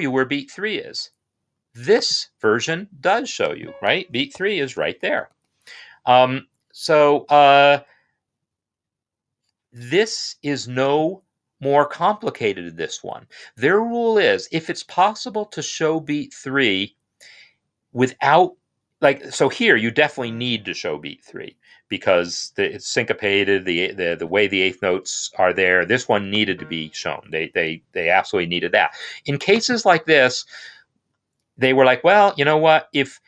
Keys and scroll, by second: 0.4 typing, 4.2 ctrl+alt+f, 4.6 3, 5.1 Escape.